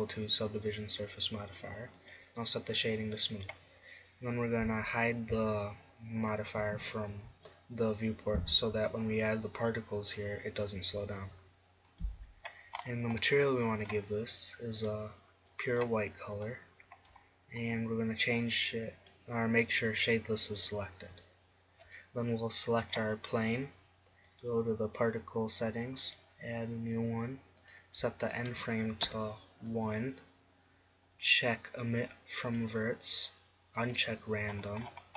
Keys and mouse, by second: 2.1-5.3 drag, 6.5-8.2 drag, 12.2-13.8 drag, 13.8 middle click, 14.0-16.6 drag, 19.1-20.7 drag, 23.2-29.6 drag.